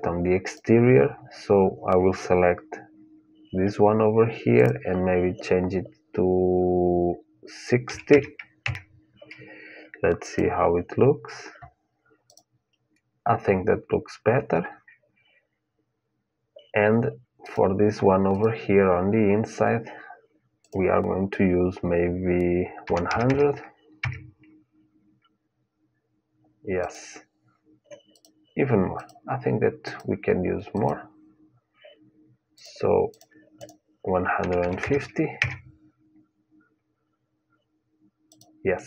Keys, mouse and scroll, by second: 10.0-11.9 drag, 12.0-14.0 drag, 14.1-16.5 middle drag, 17.2-20.0 drag, 20.4-22.3 drag, 23.0 KP_0, 26.6-35.3 drag, 38.0-38.8 drag.